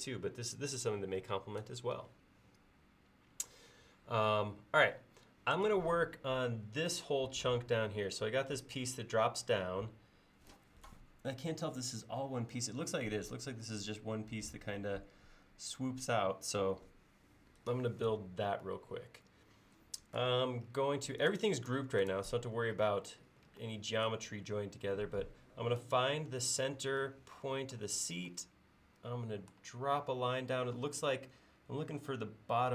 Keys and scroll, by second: 22.6 l.